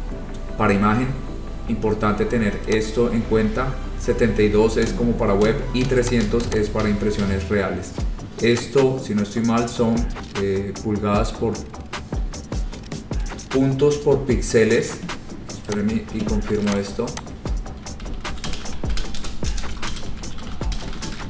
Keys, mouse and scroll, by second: 2.9 click, 6.2 click, 6.7 click, 8.7 click, 12.7 click, 15.9 click, 16.9 click, 17.3 click, 17.9-21.2 typing.